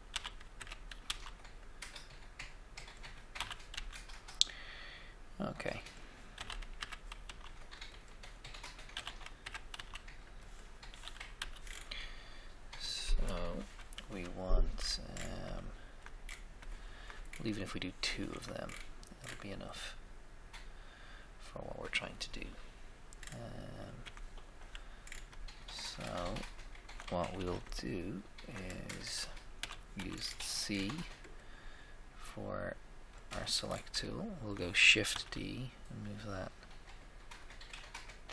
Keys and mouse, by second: 0.1 e, 0.5 Escape, 1.0 s, 1.2 s, 3.5 e, 3.7 x, 6.3 e, 6.3 e, 6.7 Escape, 7.2 s, 7.4 s, 8.9 e, 9.0 e, 9.4 Escape, 9.7 s, 11.3 f, 11.5 f, 13.5 KP_1, 13.5 1, 14.0 KP_3, 14.0 3, 18.2 Tab, 18.3 Tab, 23.1-24.1 middle drag, 23.9 Tab, 24.1 Tab, 27.3 z, 27.5 z, 29.6 a, 30.0 c, 30.1 middle click, 35.1 shift+d.